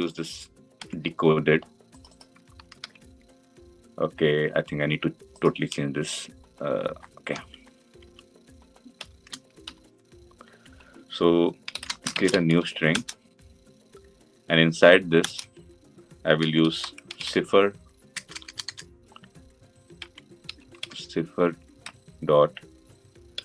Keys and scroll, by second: 0.7 ctrl+c, 12.7 Delete, 12.9 Return.